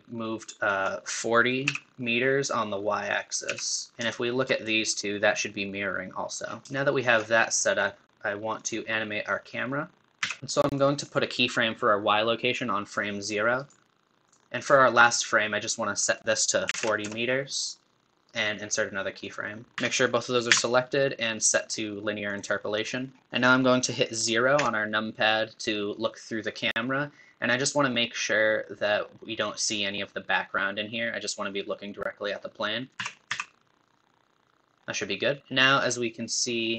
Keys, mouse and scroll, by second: 3.5 n, 3.9 scroll up 5, 4.1-6.4 shift+middle drag, 6.4 scroll down 4, 6.6-8.6 middle drag, 8.6 click, 10.2 n, 10.7-14.3 drag, 14.3 right click, 14.5 ctrl+z, 16.1-18.2 drag, 18.2-19.7 right drag, 19.7 a, 23.0 scroll down 2, 23.2 middle click, 24.6 KP_0, 32.9 click, 33.0 r, 36.5 scroll up 2.